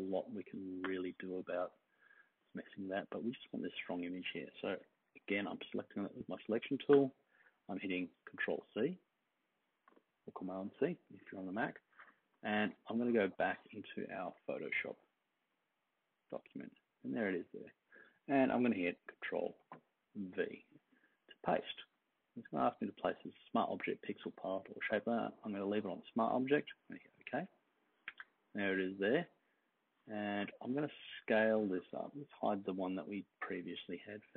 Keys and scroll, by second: 4.8 super+-, 5.0 super+-, 5.2 super+-, 8.6 super+c, 19.6 super+v.